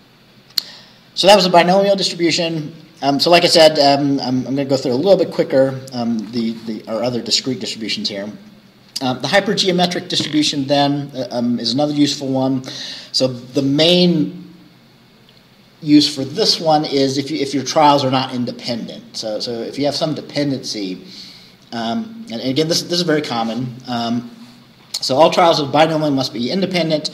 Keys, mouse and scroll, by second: 1.9-2.3 scroll down 2, 11.9 scroll down 2.